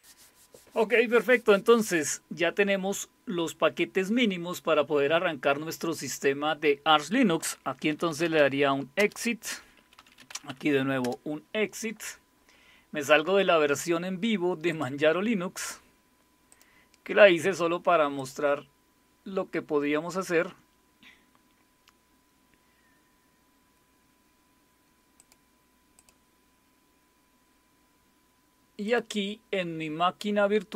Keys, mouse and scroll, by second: 7.7-8.9 typing, 9.0 Return, 9.9-11.0 typing, 11.0 Return, 14.7 click, 16.5 click, 18.2 click, 25.2 click, 26.0 click, 28.8 click.